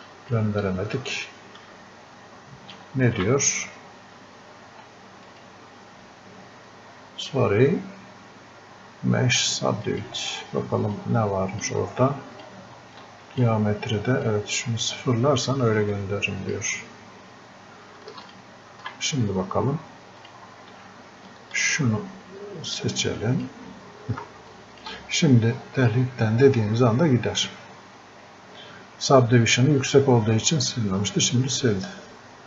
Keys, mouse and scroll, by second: 9.9-24.6 drag.